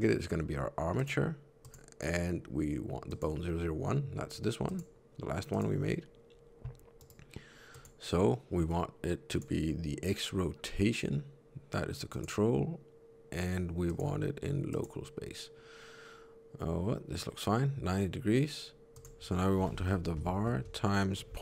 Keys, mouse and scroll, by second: 4.6 click, 5.4 click, 6.9 right click.